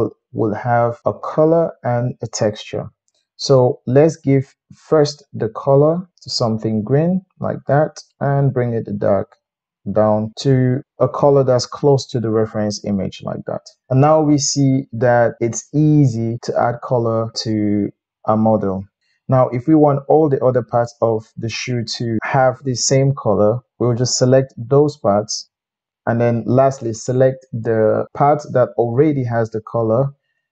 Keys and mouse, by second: 5.2-22.8 middle drag, 24.1 shift+click, 30.4 shift+click.